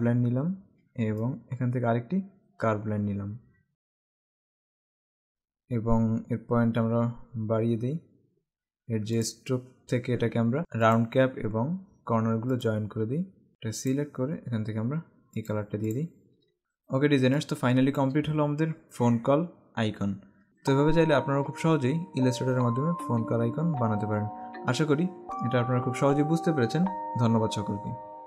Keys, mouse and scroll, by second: 3.7 v, 3.8 click, 7.1-8.4 scroll up 1, 9.4 click, 11.0 click, 12.6 click, 15.5 click, 16.7 alt+scroll up 1, 17.3 space, 17.4 click, 17.8 space.